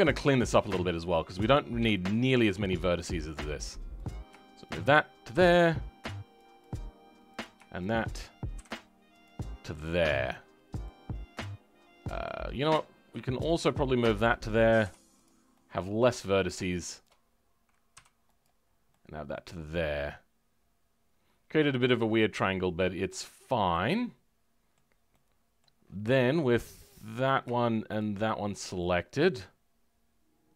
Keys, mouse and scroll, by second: 0.4-0.9 scroll up 2, 0.9 middle click, 1.5 scroll up 2, 1.8 shift+middle click, 2.6-4.0 scroll up 2, 4.0 click, 6.6 m, 9.2 m, 9.4-9.7 scroll down 2, 9.7 middle click, 10.4 scroll down 2, 10.8-12.4 middle drag, 12.4-13.4 scroll up 1, 13.4 click, 15.2 m, 15.4 scroll up 1, 15.5 middle click, 16.4 click, 18.3 m, 18.5 scroll down 3, 18.8-21.8 middle drag, 22.5-23.3 scroll down 10, 23.6-25.7 middle drag, 25.7-27.0 scroll up 14, 27.0 click, 28.2-30.5 shift+middle drag.